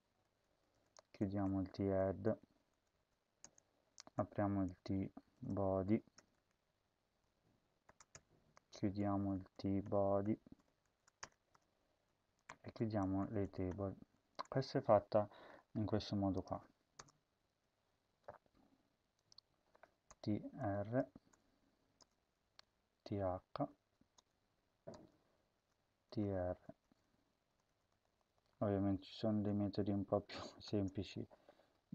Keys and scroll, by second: 0.0-3.0 typing, 3.4 Return, 4.1-6.6 typing, 7.8-14.3 typing, 8.1 Return, 11.2 Return, 17.0 Return, 17.5 Tab, 20.1-21.2 typing, 22.0 Return, 22.6 Down, 23.2 Right, 23.4 Right, 24.1 Return, 25.2-26.8 typing, 27.3 Up, 27.5 Up, 27.9 Left, 28.1 Left, 28.5 Down, 28.6 Down, 28.9 Left, 29.3 Left, 29.5 Right, 29.7 Right, 30.6 typing.